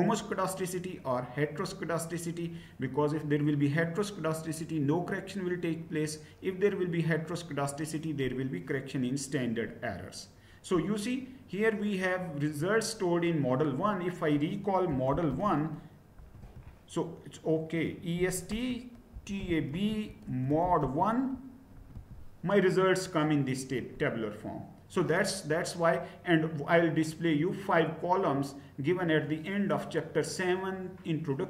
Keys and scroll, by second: 14.6-16.1 typing, 16.4 Return, 17.9-21.8 typing, 21.9 Return.